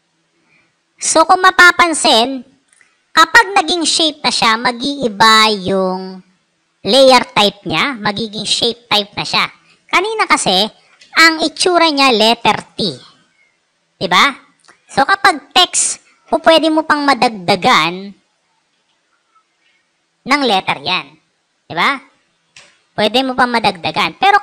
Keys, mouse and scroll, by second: 17.0 click, 17.8 click, 18.4-20.5 typing, 22.0 BackSpace, 22.4 BackSpace, 24.2 click.